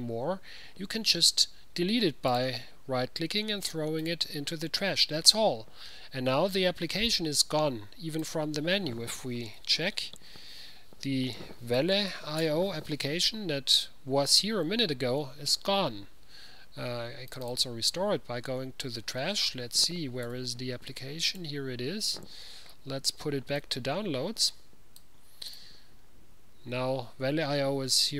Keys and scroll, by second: 9.7-10.4 typing, 11.6-13.4 typing, 20.4 typing.